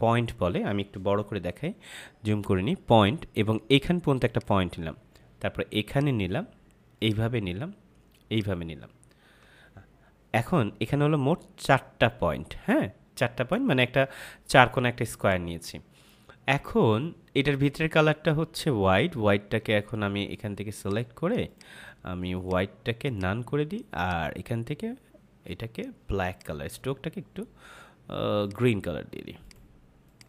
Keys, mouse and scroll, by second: 9.6 F5, 20.7 click.